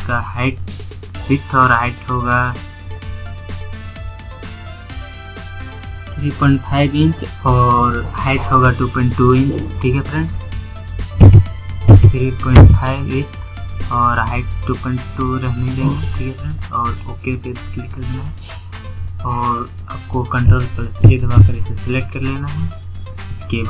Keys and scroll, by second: 19.6 ctrl+a.